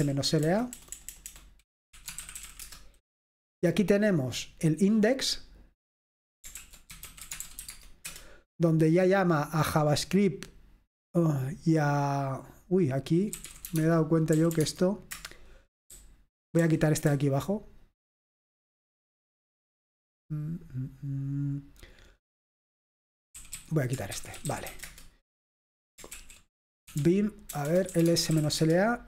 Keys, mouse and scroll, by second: 0.0-3.0 typing, 6.7 ctrl+l, 6.7-8.1 typing, 13.2-17.1 typing, 23.2-29.0 typing, 26.2 ctrl+l.